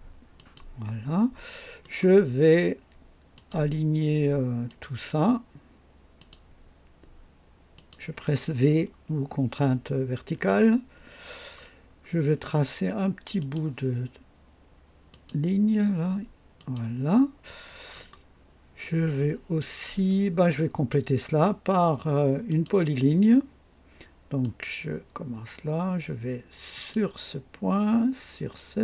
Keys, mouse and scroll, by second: 0.3 click, 1.8 right click, 3.3 click, 4.6 click, 6.1 click, 7.7 click, 10.3 v, 12.0 scroll up 1, 13.4 click, 15.1 click, 16.5 click, 17.9 right click, 22.4 click, 24.4 click, 26.7 click.